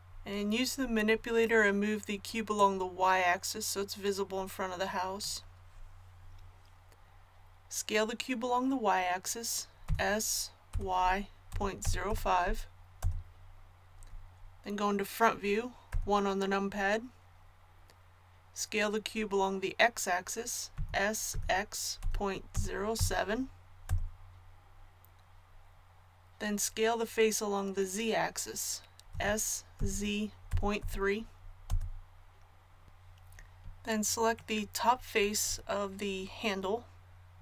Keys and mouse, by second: 2.6-9.8 drag, 9.8 s, 15.9 KP_1, 20.7 s, 29.1 s.